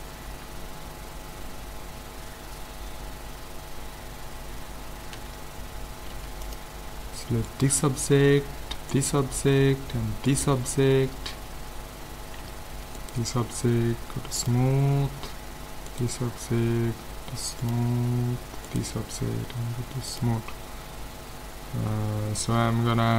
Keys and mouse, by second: 5.2 a, 6.1 ctrl+s, 7.5-12.0 right drag, 12.4 a, 13.0-15.6 right drag, 14.4 click, 15.6 click, 15.9-17.6 right drag, 17.6-19.4 drag, 18.7-20.4 right drag, 20.1-21.7 drag, 22.2-23.1 middle drag.